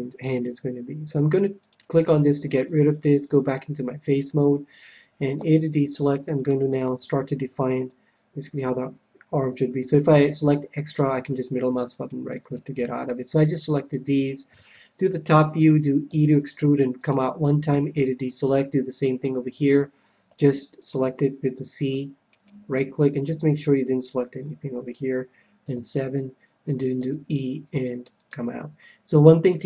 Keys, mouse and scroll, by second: 1.6-5.1 drag, 5.3 a, 5.9-7.6 middle drag, 6.9 c, 12.0-13.6 right drag, 12.5-14.0 middle drag, 14.4 KP_7, 16.1 e, 17.0-18.9 drag, 17.8 a, 18.2-19.9 middle drag, 20.2 c, 22.5-24.0 right drag, 23.0-24.8 middle drag, 25.6 KP_7, 27.0 e, 28.2-29.6 drag.